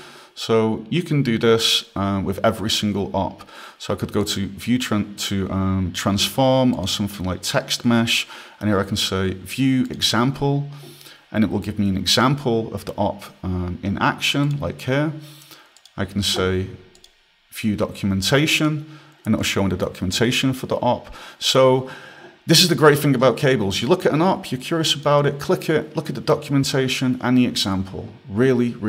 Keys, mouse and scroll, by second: 3.2 click, 4.6 click, 7.1 click, 10.2 click, 14.8 click, 18.9 click, 21.9 click, 25.3 click.